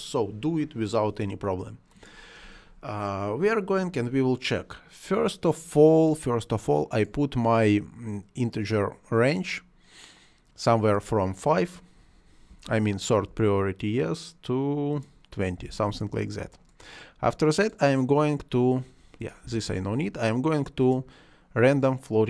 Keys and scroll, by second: 12.5 5, 13.3 Return, 15.5 2, 15.9 Return, 19.4 0, 19.7 Return.